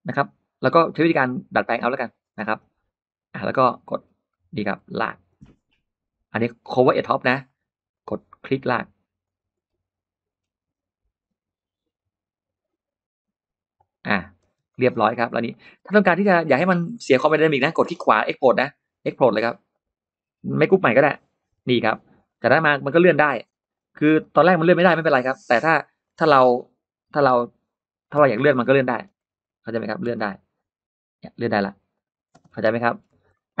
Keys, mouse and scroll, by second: 1.4 click, 2.1-2.5 scroll down 2, 3.8-4.5 scroll up 4, 4.1 middle click, 4.5 scroll down 2, 4.7 scroll up 2, 7.1 click, 7.8 click, 9.1 click, 9.4 middle click, 10.1 middle click, 13.6 click, 14.4 space, 14.5 middle click, 14.7-15.0 scroll down 1, 15.1-15.4 scroll up 1, 15.3 middle click, 15.5 scroll down 1, 15.9-17.4 scroll up 5, 16.1 click, 16.8 middle click, 17.9 right click, 19.5 click, 20.1-20.4 scroll down 2, 20.5 middle click, 21.7-22.1 scroll up 2, 22.1 click, 22.3 click, 23.1 middle click, 23.4 click, 23.9 middle click, 24.6 m, 25.9 click, 27.9 middle click, 28.0 space, 28.2 space, 28.8 scroll up 1, 28.9 scroll down 1, 29.0 scroll up 1, 29.3-29.6 scroll down 1, 29.9 m, 30.1 click, 31.8 click, 32.1-33.6 scroll down 5, 32.1 space, 32.4 middle click, 33.1 Escape, 33.2 middle click.